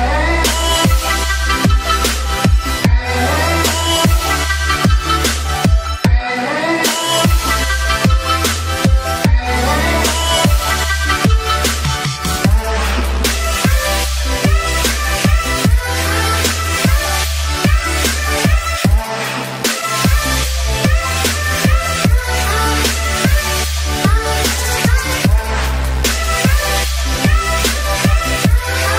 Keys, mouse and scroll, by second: 6.5 space, 6.5 click, 6.8 space, 6.8-15.1 alt+drag, 15.1-16.0 typing, 15.2 click, 15.7 click, 16.2-17.9 drag, 17.9-18.9 typing, 18.1 click, 19.1 click, 20.0 click, 20.3 typing, 20.4-23.5 drag, 23.5-28.1 typing, 23.6 click, 23.9 click, 24.7 click, 25.0 click, 25.9 ctrl+z, 26.3 click, 26.7 click, 27.4 click, 28.2 alt+click.